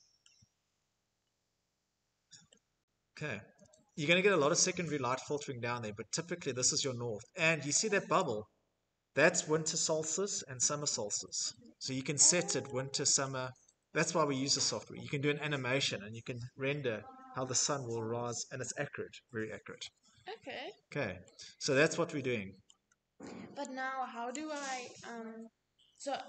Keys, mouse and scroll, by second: 0.0 scroll, 0.9 scroll, 2.1 shift+middle click, 5.7 click, 10.3 click, 12.2 shift+middle click, 12.7 scroll, 14.1-14.5 scroll, 18.7 middle click, 19.1-19.6 scroll, 21.6-22.1 scroll, 23.2 click, 25.4 click.